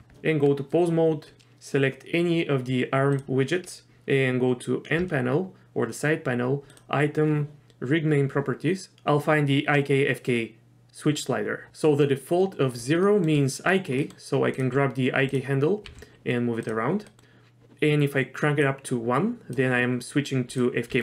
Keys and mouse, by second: 0.1 Tab, 5.0 n, 6.7 click, 13.0 shift+middle drag, 14.0 middle click, 15.8 g, 17.0 middle click, 18.8 click, 20.5 drag, 20.9 r.